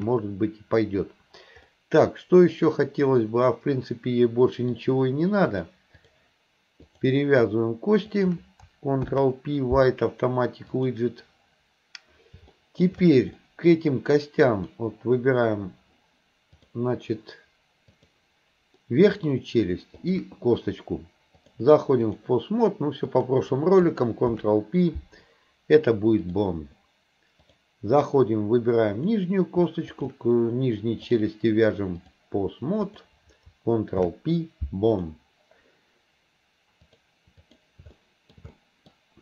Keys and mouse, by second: 1.7-4.7 middle drag, 5.5 click, 6.9 click, 8.1 shift+click, 9.0 ctrl+p, 12.6 shift+middle click, 13.4 middle click, 14.5 click, 16.6 click, 17.9 click, 18.9 middle click, 21.4-22.3 drag, 23.2 click, 24.3 ctrl+p, 27.6 click, 28.9 click, 29.9 shift+click, 31.3-32.3 drag, 32.9 click, 34.0 ctrl+p, 36.9 click, 38.0 shift+middle click, 38.6 middle click.